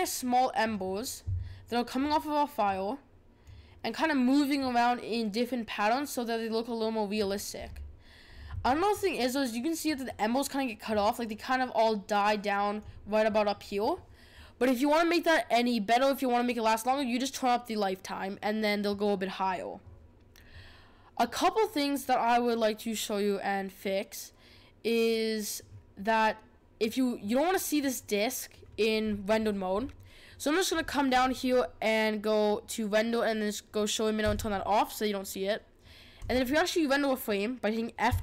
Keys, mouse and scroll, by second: 0.6 click, 2.7-7.6 drag, 7.6 scroll up 6, 8.2 scroll down 5, 8.5-10.9 middle drag, 10.9-13.9 drag, 29.7 scroll down 5, 30.7-34.2 scroll down 10, 34.2 click, 36.1 click.